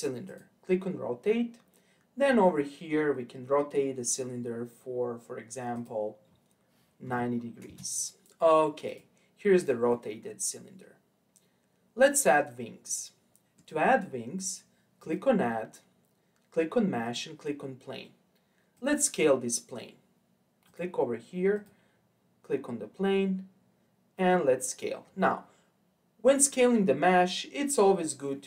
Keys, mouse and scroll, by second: 0.2-3.3 drag, 5.7-9.0 drag, 9.9-12.9 middle drag, 15.0-18.0 drag, 18.7 click, 20.6-21.6 drag, 22.5-25.9 scroll up 3.